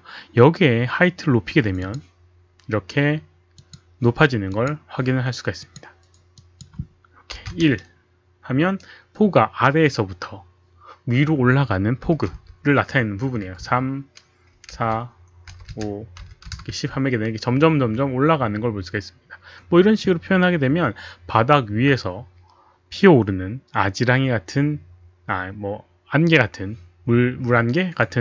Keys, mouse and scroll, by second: 1.8 click, 3.5 click, 4.5 click, 6.4 click, 7.4 KP_1, 12.1 KP_3, 12.3 Return, 12.9 Return, 12.9 click, 12.9 KP_2, 12.9 KP_1, 13.4 KP_3, 14.7 Return, 15.5 KP_5, 15.7 Return, 16.1 KP_1, 16.5 KP_0, 16.6 Return.